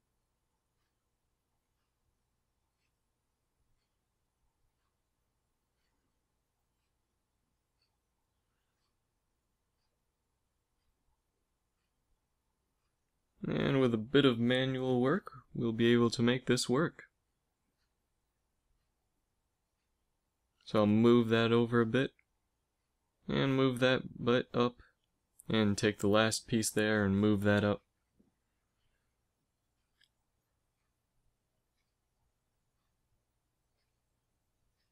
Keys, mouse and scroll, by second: 0.0 a, 0.5 b, 1.4 s, 4.7 b, 5.3 right click, 5.5 middle click, 6.0 c, 8.4 s, 11.8 ctrl+KP_Subtract, 12.6 s, 15.9 a, 17.0 click, 17.7 a, 20.4 g, 22.7 right click, 23.1 g, 26.6 g, 30.2 middle click, 30.5 g, 33.5-34.9 drag, 33.9 g.